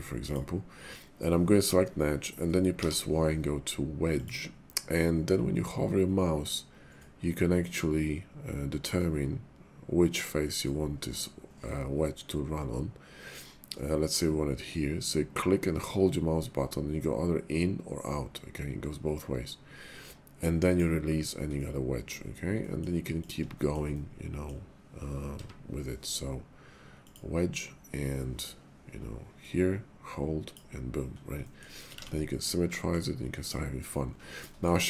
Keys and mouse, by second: 2.7 y, 15.4-20.8 drag, 21.5 middle click, 22.6 middle click, 23.1 click, 23.5 shift+middle click, 23.9 middle click, 25.2 y, 29.4-30.5 drag, 31.4 middle click, 31.9 alt+x, 32.7 middle click, 33.3 click, 34.4 shift+middle click.